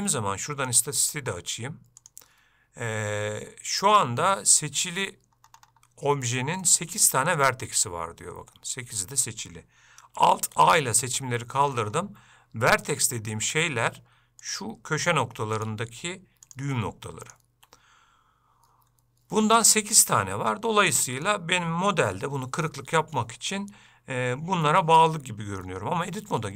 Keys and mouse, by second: 0.8-5.7 drag, 6.7 shift+middle click, 10.6 alt+a, 13.0 ctrl+click, 14.5 click, 16.5 shift+click, 19.5 shift+middle click, 21.0 middle click.